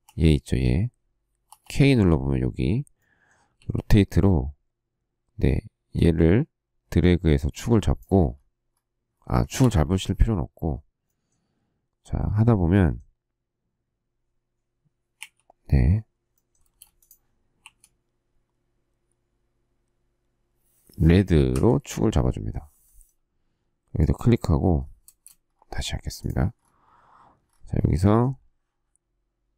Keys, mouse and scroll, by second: 0.0 k, 3.5 q, 9.6 Escape, 15.1 q, 16.6 space, 17.6 q, 21.5 Right, 25.0 space.